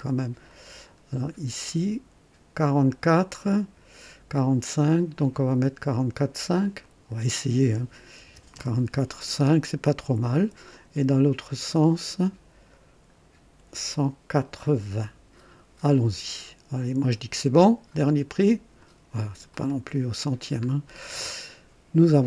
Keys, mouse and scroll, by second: 0.4 click, 1.2 scroll down 1, 3.6 scroll up 1, 4.6 scroll down 1, 6.8 click, 8.2 BackSpace, 8.5 KP_5, 11.4 click, 12.1 scroll down 1, 12.7-13.4 scroll up 2, 17.9 click, 18.8 click, 19.5 click, 20.1-20.4 scroll down 1, 21.0-21.7 right drag.